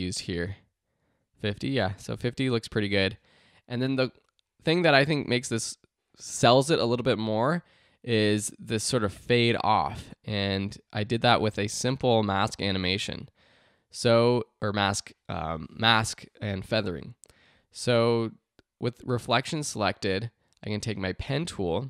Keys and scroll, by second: 0.4 t.